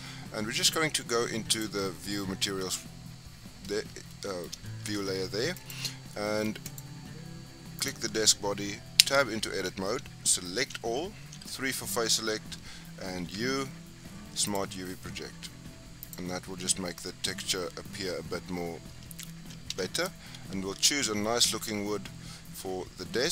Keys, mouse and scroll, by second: 2.6 click, 4.1-4.9 middle drag, 4.9-5.6 scroll up 2, 5.6 click, 6.1-6.7 middle drag, 6.7 click, 7.8 click, 9.0 Tab, 10.5 a, 11.2 3, 13.2 u, 19.7 Tab.